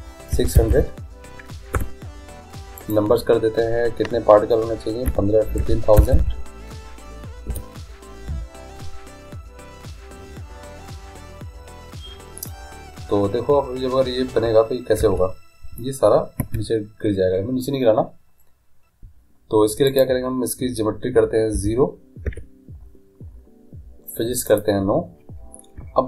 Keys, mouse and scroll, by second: 0.7 0, 2.8-4.8 drag, 6.2 0, 6.3 0, 15.0 alt+a, 16.5 Escape, 20.0-21.9 drag, 24.5-26.0 drag.